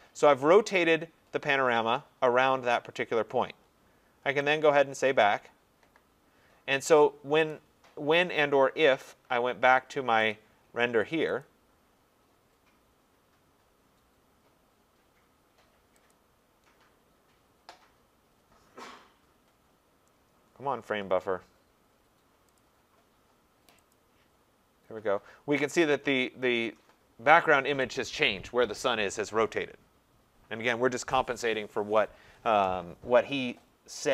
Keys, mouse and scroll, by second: 4.6 click, 7.5 click, 10.3 click, 11.4 click, 16.2 click, 22.6 click, 24.0 click.